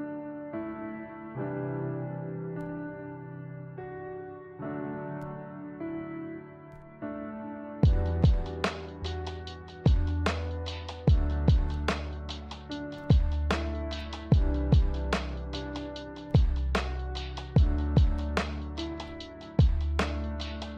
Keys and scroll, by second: 15.2 d, 16.9 z.